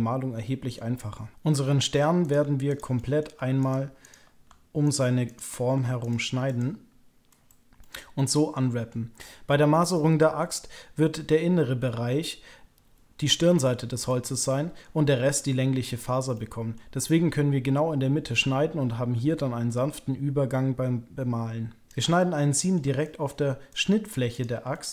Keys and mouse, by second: 2.7 shift+click, 2.9 click, 3.6 shift+click, 4.0 shift+click, 4.9 shift+click, 5.3 shift+click, 6.0 shift+click, 6.4 shift+click, 7.8-8.9 middle drag, 9.9 middle click, 14.0 middle click, 16.3 middle click, 22.1 middle click, 23.0 shift+click, 23.6 ctrl+click, 24.3 ctrl+click, 24.7 shift+click.